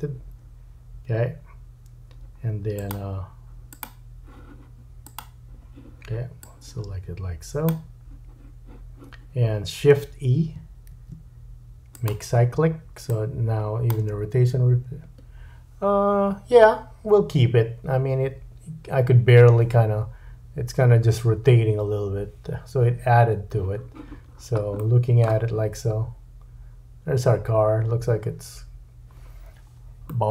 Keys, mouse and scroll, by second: 2.9-3.7 drag, 3.8-5.1 drag, 5.2-6.4 drag, 10.9 shift+e, 13.1 click, 14.0 space, 18.3-19.6 middle drag, 24.3-24.9 scroll down 3, 24.8 middle click, 30.1 middle click.